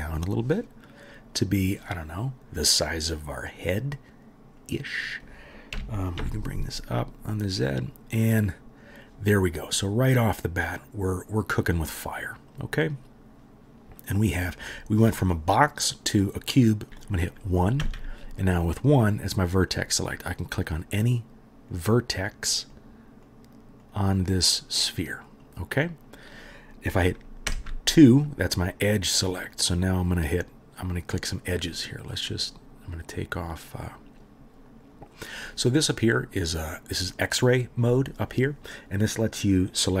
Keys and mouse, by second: 4.1 middle click, 4.7-18.4 right drag, 5.7 g, 17.8 1, 18.4 middle click, 18.5-20.3 right drag, 20.3-20.6 middle drag, 20.6 right click, 20.8-21.8 middle drag, 21.8-22.2 right drag, 22.2 middle click, 22.3-23.2 right drag, 23.2 middle click, 23.3-24.3 drag, 27.5 2, 28.6-29.5 right drag, 29.5 middle click, 29.6-30.8 right drag, 30.8 middle click, 30.9-33.7 right drag, 37.3-39.8 middle drag, 39.8-40.0 right drag.